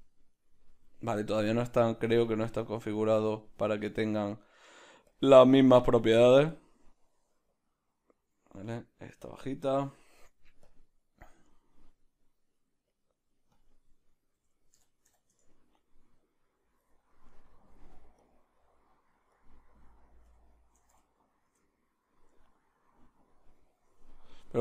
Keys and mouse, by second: 1.7-5.5 drag, 5.5-6.5 middle drag, 6.5-9.7 drag, 9.7 right click, 10.6 click, 11.2-13.0 middle drag, 13.0-17.3 drag, 15.4 Return, 17.3 right click, 18.2 click, 18.6 middle click, 19.3-23.2 drag, 21.4 0, 23.2-24.6 right drag.